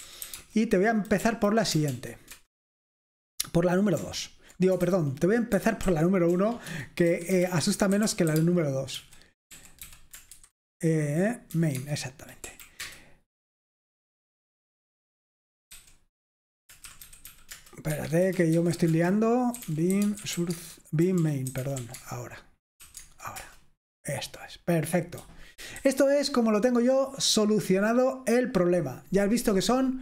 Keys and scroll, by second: 0.0-1.9 typing, 1.2 Right, 2.3 Return, 4.9 shift+Caps_Lock, 4.9-10.4 typing, 11.5 typing, 11.7 Tab, 12.4 Right, 12.6-13.3 typing, 15.7-23.0 typing, 23.0 Tab, 23.4 Return, 25.9-28.3 typing.